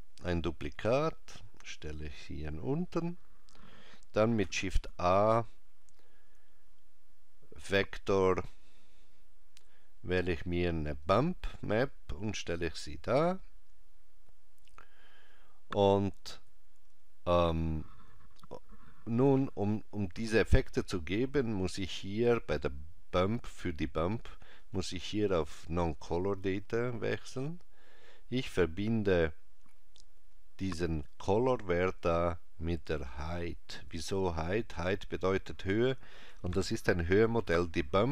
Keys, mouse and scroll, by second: 4.5 shift+a, 24.6 click, 31.1 click.